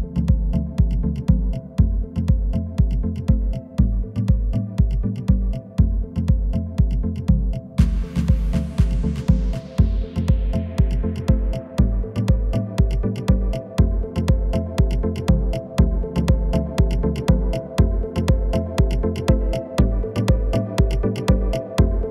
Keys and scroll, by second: 21.1 shift+e.